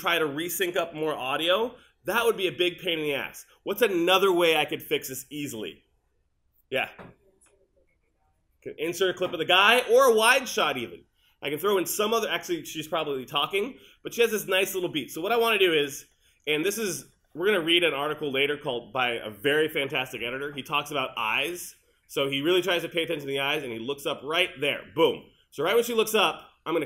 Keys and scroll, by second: 2.1 super+z.